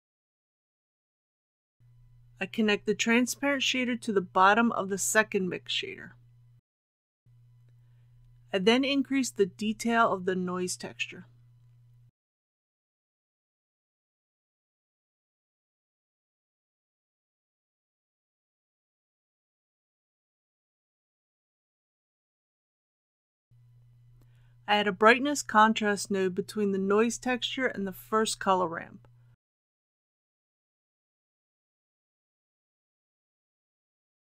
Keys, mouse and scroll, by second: 21.4 KP_8, 24.2 shift+a, 27.1-34.3 drag.